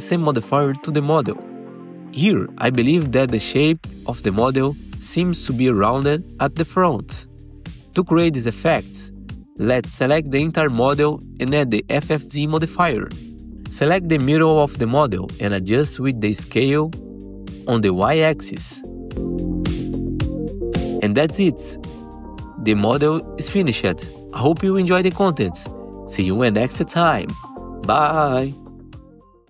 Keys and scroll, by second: 10.0 F4, 10.2 F4, 15.7 F3, 16.4 F3, 16.8 r, 21.7-22.5 typing, 23.3 ctrl+alt+x, 24.9 F4, 27.6 F4.